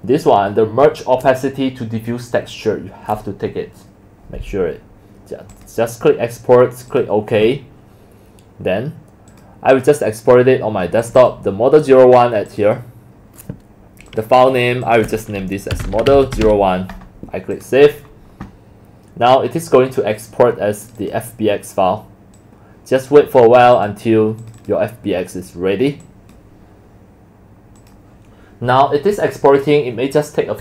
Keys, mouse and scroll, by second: 5.5 click, 9.3 click, 9.7 click, 11.0 click, 11.2 click, 12.5 click, 14.1 click, 15.5-16.9 typing, 17.5 click, 21.6 click, 28.3 click.